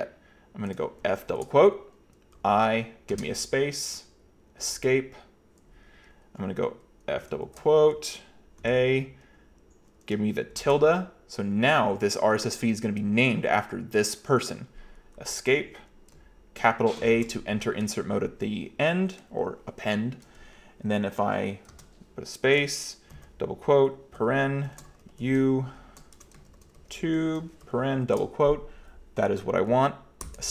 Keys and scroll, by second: 1.1 shift+f, 1.4 shift+', 2.4 i, 3.1 space, 4.6 Escape, 7.1 f, 7.4 shift+', 8.6 a, 10.6 shift+`, 15.2 Escape, 17.0 shift+a, 21.7 space, 23.2 typing, 24.2-28.6 typing, 30.3 Escape.